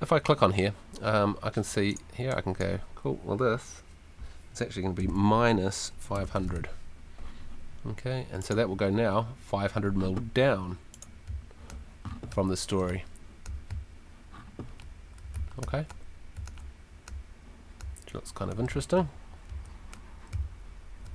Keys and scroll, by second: 5.0-6.9 typing, 11.3 a, 11.7 w, 13.2-14.2 typing, 15.2-17.0 typing, 18.3-20.3 typing.